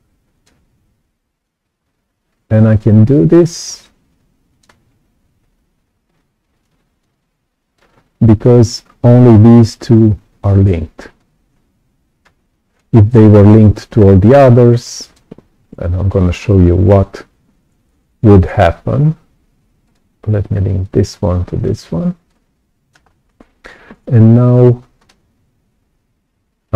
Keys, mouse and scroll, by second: 1.4-3.3 ctrl+alt+drag, 3.5-4.5 ctrl+alt+right drag, 3.6 click, 5.8 alt+shift+click, 7.0 alt+shift+click, 8.0 right click, 8.4 click, 11.1-12.7 right drag, 11.4 click, 14.6 right click, 14.7 click, 19.8 click, 20.8 click, 22.2 right click, 22.3 click, 24.9 click.